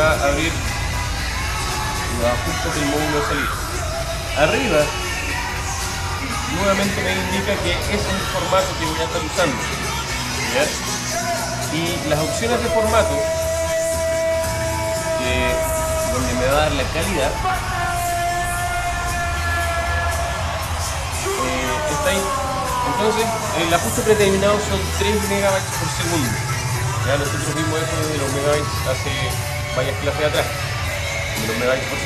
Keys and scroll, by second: 5.2 alt+super++, 12.1 alt+super+-, 26.6 alt+super++.